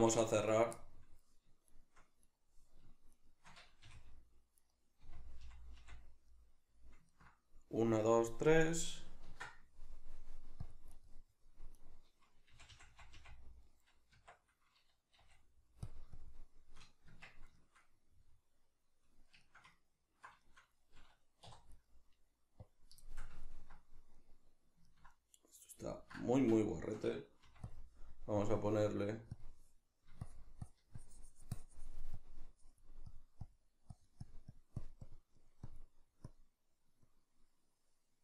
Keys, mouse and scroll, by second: 0.5 right click, 0.7-1.7 middle drag, 1.7 shift+right click, 2.2 right click, 3.1 shift+right click, 3.9 f, 4.5 right click, 5.0 f, 6.3-11.0 middle drag, 9.3 ctrl+r, 11.0 right click, 11.7 right click, 12.5 f, 14.3 b, 15.9 click, 17.1 b, 17.2 Tab, 17.2 click, 17.5-21.7 shift+middle drag, 21.5 3, 21.7 right drag, 22.6 click, 23.0-26.5 shift+middle drag, 26.3 Tab, 26.5-27.7 drag, 26.5 b.